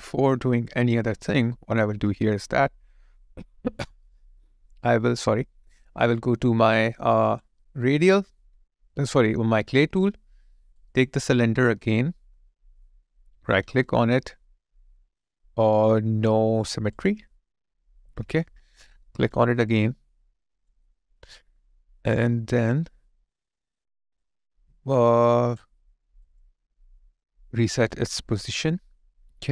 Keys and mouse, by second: 13.8 right click, 19.8 alt+click, 27.6 alt+click.